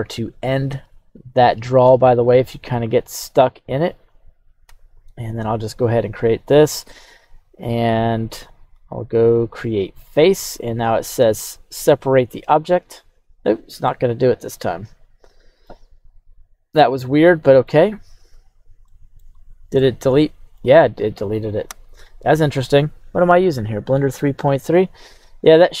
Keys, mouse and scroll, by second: 5.9 click, 8.6-10.1 drag, 13.3 click, 13.8-15.6 middle drag, 16.3 right click, 17.2 middle click, 18.0 right click, 18.4 right click, 18.8 middle click, 19.4 right click, 19.7 middle click, 21.7 KP_3, 22.2 scroll up 1, 22.8 scroll up 3, 25.2-25.5 scroll down 1, 25.6 right click.